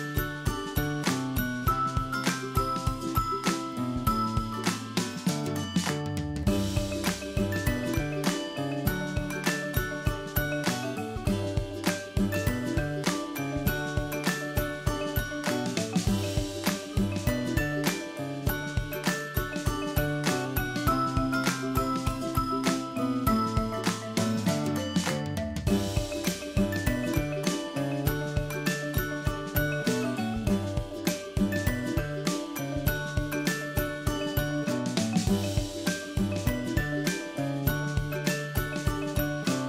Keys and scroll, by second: 0.4 ctrl+-.